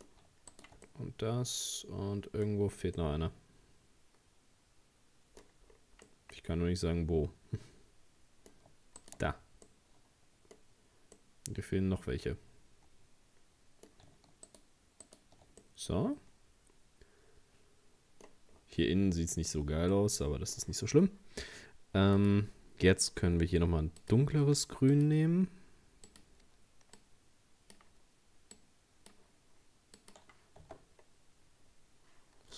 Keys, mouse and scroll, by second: 0.5 shift+right click, 0.9-2.5 middle drag, 2.5-3.0 scroll up 5, 3.0-5.7 middle drag, 5.7-6.1 scroll down 4, 6.1-9.0 middle drag, 9.0 shift+right click, 9.7 middle click, 10.6-11.0 scroll up 4, 11.2-14.2 middle drag, 14.5 shift+right click, 15.1 shift+right click, 15.6-18.5 middle drag, 18.5-19.1 scroll down 3, 19.1-19.7 scroll down 5, 19.7 scroll up 1, 19.9-22.2 middle drag, 22.2-29.1 drag, 30.0 click, 30.7 Tab, 30.8-31.7 scroll down 2, 31.7-32.2 scroll up 2.